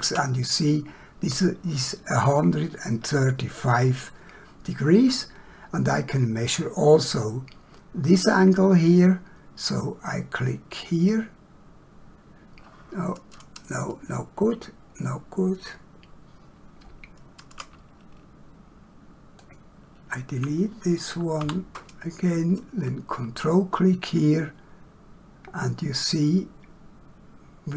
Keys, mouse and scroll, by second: 11.0 click, 19.3 shift+click, 21.4 Delete.